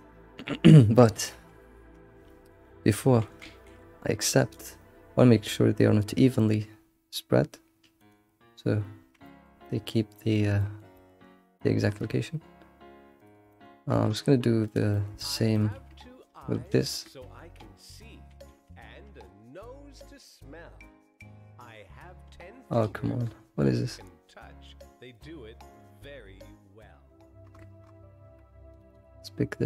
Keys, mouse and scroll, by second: 1.3 ctrl+z, 3.4 alt+shift+g, 4.5-7.5 drag, 8.7-9.2 scroll down 6, 9.2-11.2 middle drag, 11.2-11.6 scroll up 3, 11.6-12.0 middle drag, 12.0-13.2 scroll down 3, 13.2 click, 13.5-14.6 shift+middle drag, 14.6 click, 14.9-16.6 shift+middle drag, 16.6 ctrl+click, 17.1-18.3 middle drag, 18.3 alt+shift+g.